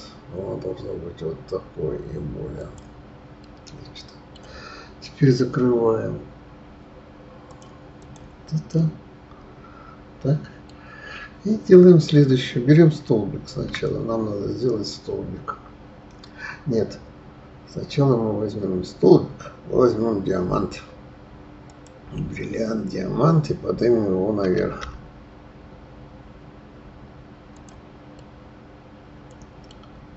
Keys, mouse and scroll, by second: 3.3-6.4 middle drag, 7.4 click, 8.0 click, 8.7-11.7 middle drag, 13.5 shift+a, 24.4 g, 28.1-29.7 middle drag, 29.7 scroll up 2.